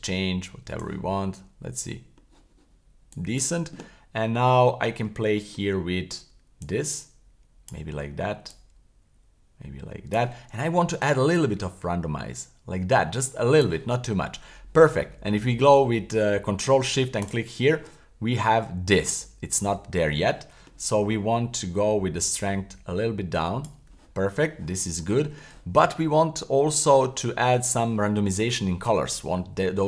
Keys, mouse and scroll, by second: 1.1 scroll down 3, 2.1 scroll up 2, 3.1 click, 4.7-5.1 scroll up 2, 5.2 shift+middle click, 5.7-6.1 scroll up 1, 6.6-7.7 drag, 8.5 click, 11.0-13.7 drag, 13.9-14.5 scroll down 4, 15.3 scroll down 2, 17.2 ctrl+shift+click, 18.5 middle click, 18.9 scroll up 3, 19.6 middle click, 19.7-20.1 scroll down 2, 20.3 shift+middle click, 22.3-23.7 drag, 25.0 shift+middle click, 26.5 middle click.